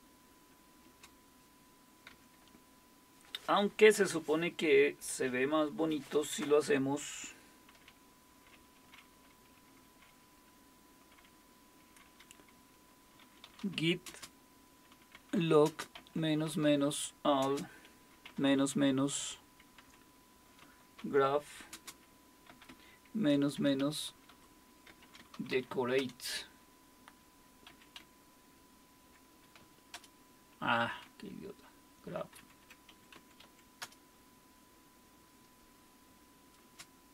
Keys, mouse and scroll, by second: 0.8 typing, 2.1 typing, 13.0-31.5 typing, 31.7 Left, 31.8 Left, 31.9 Left, 32.0 Left, 32.0 Left, 32.9 Delete, 33.1 Right, 33.4 a, 33.8 Return, 36.6 space.